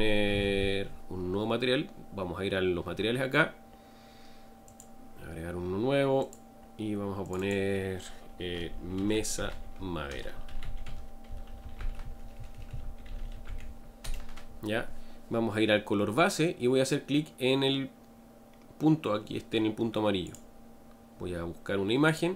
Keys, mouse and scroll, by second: 4.7-7.2 drag, 7.3-14.0 drag, 14.0 BackSpace, 22.1-22.3 drag.